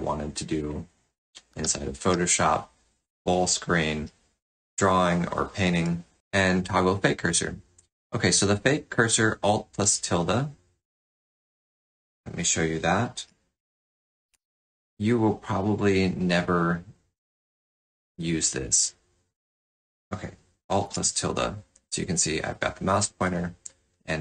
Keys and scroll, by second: 0.7 space, 1.5 f, 3.9 k, 11.0 space, 13.3 alt+`, 20.8 alt+`, 23.0 alt+`.